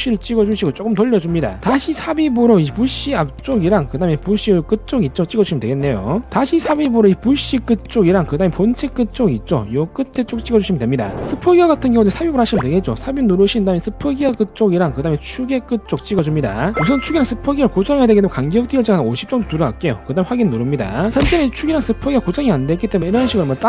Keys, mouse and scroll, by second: 0.0 g, 0.6 click, 1.2 click, 2.0 click, 2.5 shift+middle click, 3.2 scroll up 1, 3.8 click, 4.1 scroll down 2, 4.4 shift+middle click, 4.9 scroll up 1, 5.9 click, 7.0 click, 7.3 scroll down 1, 8.1 click, 8.4 scroll down 1, 8.6 middle click, 9.1 middle click, 9.5 scroll down 1, 10.6 click, 12.1 c, 13.2 click, 13.7 scroll up 1, 14.5 click, 14.9 scroll down 1, 15.0 middle click, 15.6 scroll up 1, 16.4 click, 16.7 scroll up 1, 19.3 5, 20.3 scroll up 1, 21.0 click, 21.5 middle drag, 21.8 middle click, 22.5 middle click, 23.2 click.